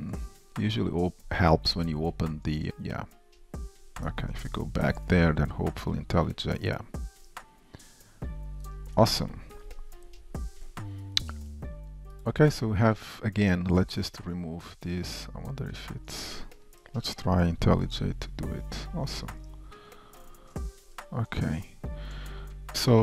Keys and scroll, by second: 7.0 ctrl+Tab, 9.8 alt+Return, 11.3 super+s, 17.7 alt+Return, 20.1 shift+F6.